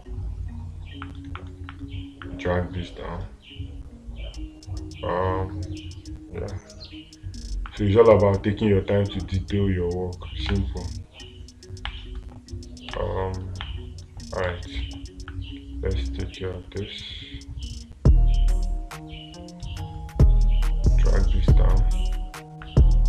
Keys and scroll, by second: 10.9 space, 13.4 space.